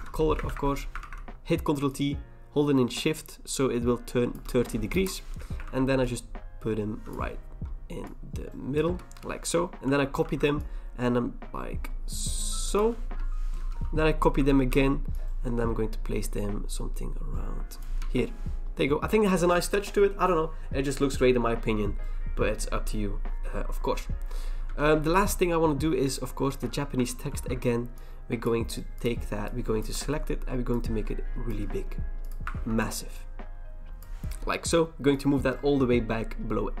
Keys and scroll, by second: 0.4 ctrl+d, 1.0 ctrl+t, 4.9 Return, 5.6 ctrl+t, 8.8 Return, 9.8 ctrl+j, 10.2 ctrl+t, 13.0 Return, 14.4 ctrl+j, 14.7 ctrl+t, 18.0 Return, 24.6 v, 27.3 ctrl+j, 32.5 ctrl+t, 34.4 Return.